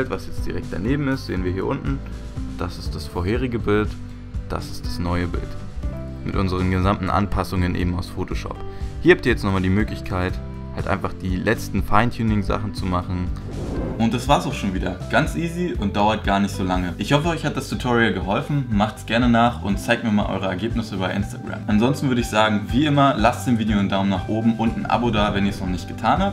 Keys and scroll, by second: 2.1 Right, 3.9 Left.